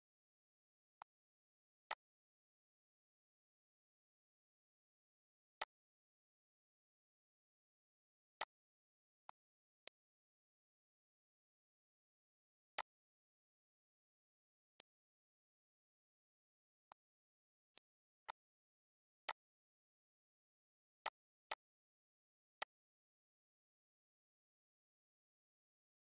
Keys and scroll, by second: 4.0 ctrl+c, 6.4 1, 7.5 Return, 9.0 ctrl+s.